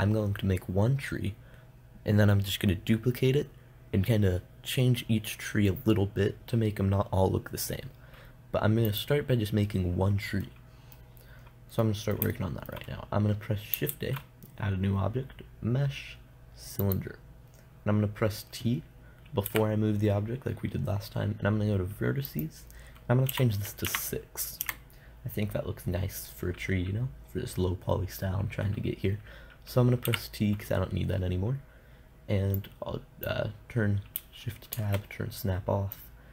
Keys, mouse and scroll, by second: 9.3-11.9 drag, 14.3 shift+a, 19.9 t, 22.7-25.0 drag, 30.5 t, 33.0-35.0 drag, 35.2 shift+Tab.